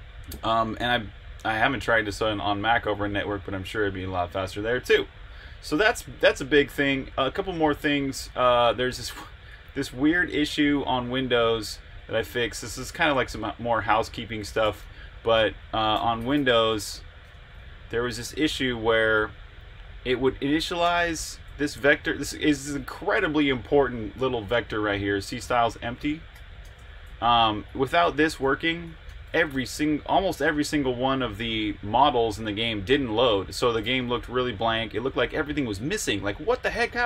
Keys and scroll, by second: 7.9-9.6 typing, 12.8 super+j, 19.1 j, 20.2-21.6 typing, 25.7-31.9 typing, 33.8-37.0 typing.